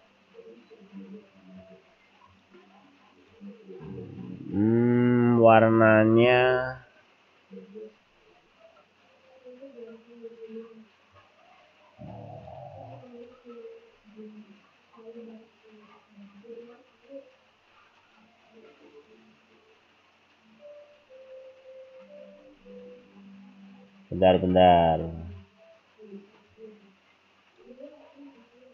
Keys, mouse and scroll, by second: 2.3 click, 3.2 click, 3.8-4.6 scroll down 3, 7.1 scroll up 2, 8.1-9.0 scroll up 5, 11.1 click, 13.2 click, 14.0-14.7 scroll down 3, 18.1 right click, 19.1 right click, 22.6-23.2 scroll up 5, 24.3 click, 26.5 click.